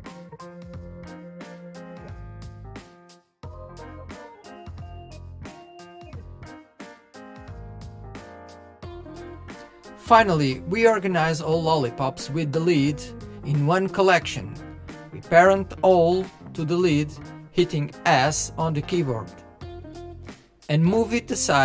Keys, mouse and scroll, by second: 0.0 shift+click, 0.7 ctrl+l, 0.9-2.0 middle drag, 2.6-3.0 middle drag, 3.0 click, 3.9 shift+click, 4.6 ctrl+l, 4.9-6.0 middle drag, 6.0 scroll down 1, 6.1-6.6 middle drag, 6.6-7.1 scroll up 1, 7.1-8.1 drag, 8.1 middle click, 8.4 KP_1, 8.6-9.0 scroll down 1, 9.0-9.9 shift+middle drag, 9.9 click, 14.2 shift+click, 17.3 ctrl+p, 18.8 click, 19.2 click, 19.8 click.